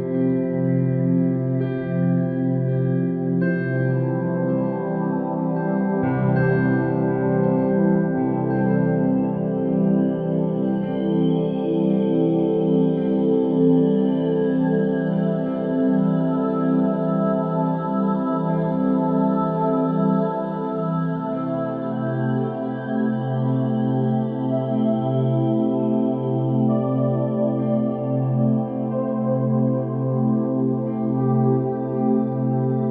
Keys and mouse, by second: 1.1 KP_3, 2.5 Tab, 2.9 s, 6.3 middle click, 7.2 KP_1, 7.9 Tab, 8.3 2, 8.7 middle click, 10.9 shift+click, 11.6 ctrl+click, 12.7 ctrl+b, 16.8 Tab, 17.3 ctrl+a, 19.3 Tab, 20.0 ctrl+b, 24.0 click, 25.7 click, 26.6 click, 27.6 alt+z, 29.3 x, 31.0 Tab, 32.1-32.9 middle drag.